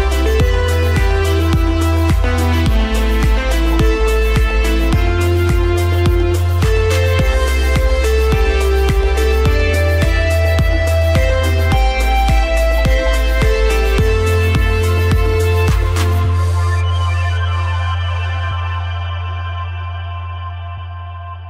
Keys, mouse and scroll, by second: 2.0 click, 6.6 ctrl+KP_Add, 8.4 space, 8.7 click, 8.9 space, 10.3 click, 15.1 click.